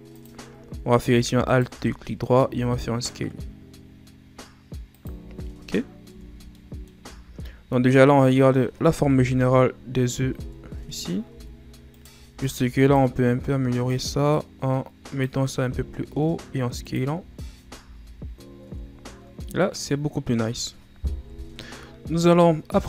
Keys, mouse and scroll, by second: 1.5 alt+right click, 1.9-2.5 scroll up 2, 2.5 s, 5.2 z, 5.5-6.1 scroll down 2, 6.1 Tab, 6.2-6.6 scroll down 2, 6.6 middle click, 7.0 a, 7.4-7.9 scroll up 3, 7.9-9.1 middle drag, 9.1 KP_1, 10.4 Tab, 11.3 z, 11.9 right click, 12.3 b, 13.4-13.9 scroll up 1, 13.9-15.6 drag, 15.6 s, 17.3-17.8 scroll down 1, 17.8 z, 18.6 Tab, 19.3-19.6 scroll down 1, 19.6-21.1 middle drag, 21.1 KP_1.